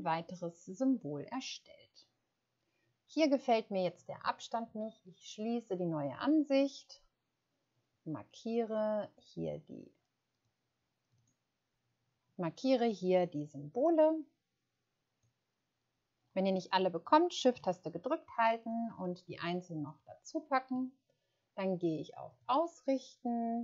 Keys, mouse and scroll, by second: 11.1 click, 18.6 shift+click, 19.7 shift+click.